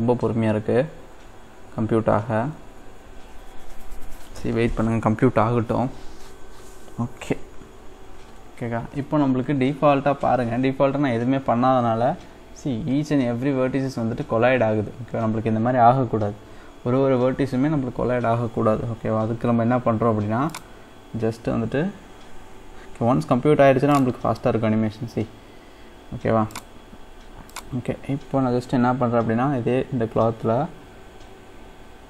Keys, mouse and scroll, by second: 20.5-23.6 drag, 23.9-29.3 drag, 29.3-30.7 scroll down 2, 31.5-31.9 scroll up 4, 31.9-32.0 scroll down 1.